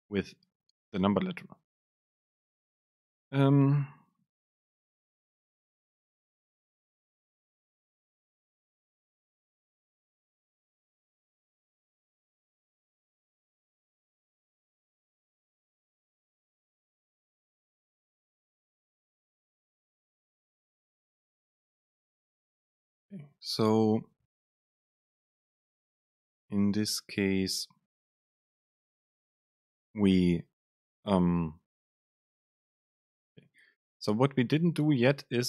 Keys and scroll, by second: 11.6 End, 12.8 Return, 16.8 Down, 19.8 Return, 20.1 super+space, 20.8 Up, 21.2 super+space, 22.9 Up, 27.5 Down, 29.8 super+space.